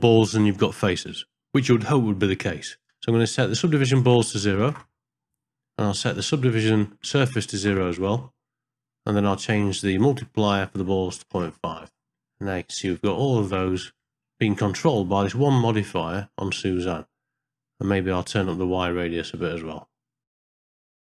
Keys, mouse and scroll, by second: 4.0 click, 6.5-7.6 drag, 10.0-11.4 drag, 12.4 middle click, 13.1 shift+middle click, 13.7 ctrl+middle click, 18.8-20.2 shift+drag, 20.4 middle click, 20.8 ctrl+middle click, 21.1 shift+middle click.